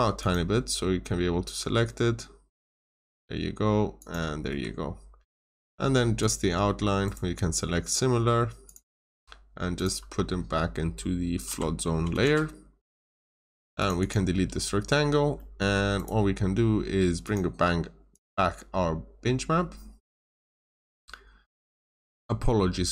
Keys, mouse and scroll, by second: 0.1 click, 1.2-2.3 scroll up 1, 2.3-2.7 scroll down 1, 2.7 click, 4.4 Escape, 5.4 scroll up 1, 6.1 click, 6.4 scroll down 1, 7.0 right click, 8.6 click, 11.4 typing, 12.2 Return, 12.9 Escape, 13.7 click, 13.9 double click, 14.3 Delete, 15.3 middle click, 15.9 right click, 17.2 click.